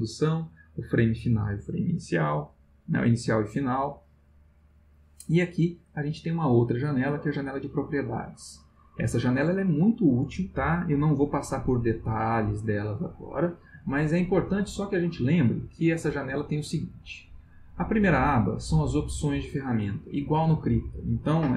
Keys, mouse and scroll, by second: 17.8 click.